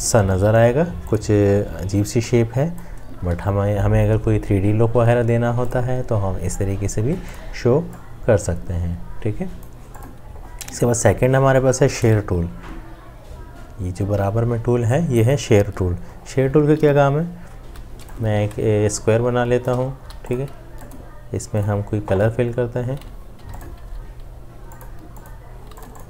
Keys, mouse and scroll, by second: 3.3 ctrl+g, 17.7 m, 18.7 shift+click, 19.9 click, 20.1 v, 23.5 i, 23.9 v.